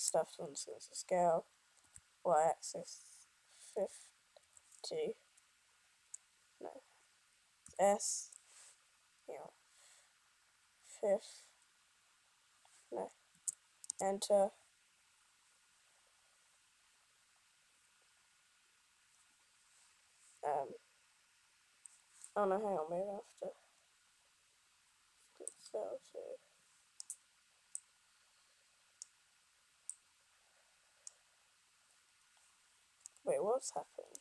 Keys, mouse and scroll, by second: 0.9 s.